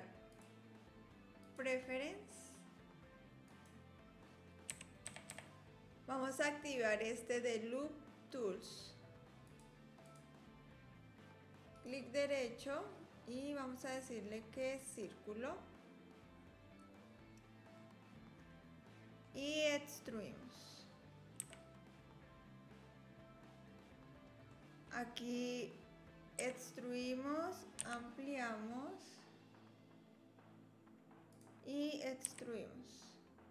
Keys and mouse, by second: 0.3-2.3 drag, 11.7-14.8 drag, 17.9-19.2 middle drag, 21.4 e, 24.5 click, 26.4 e, 32.2 e.